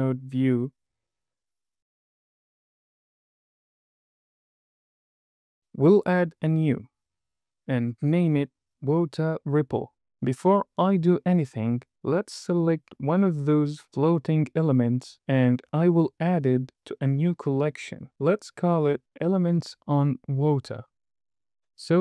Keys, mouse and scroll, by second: 0.9-2.4 drag, 3.3 click, 4.2 click, 6.6 click, 7.5-10.2 drag, 9.5 p, 10.7-11.4 scroll up 4, 11.2 middle click, 11.5 click, 11.9 click, 12.8 click, 13.5 middle click, 14.3 n, 14.6 middle click, 16.2 click, 16.7 m.